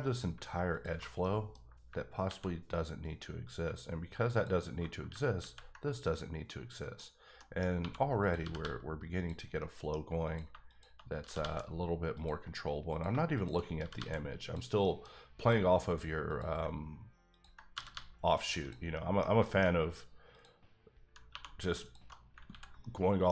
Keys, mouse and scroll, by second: 0.7 alt+click, 1.2 middle click, 1.6 scroll up 1, 2.2 ctrl+x, 2.7-3.6 scroll up 1, 4.3 alt+click, 5.3 x, 5.7 scroll down 1, 6.1 middle click, 7.4 middle click, 7.8 1, 8.2 click, 8.4 g, 8.6 g, 9.1 click, 9.6 middle click, 10.2 click, 11.2 g, 11.4 g, 12.1 click, 12.9 click, 13.4 shift+click, 13.8 g, 13.9 g, 14.4 click, 14.8 middle click, 15.4 click, 16.3 click, 17.3 ctrl+click, 17.7 g, 17.9 g, 18.6 click, 18.9 middle click, 20.3 click, 21.3 2, 21.8 alt+click, 22.5 ctrl+x, 22.8 middle click.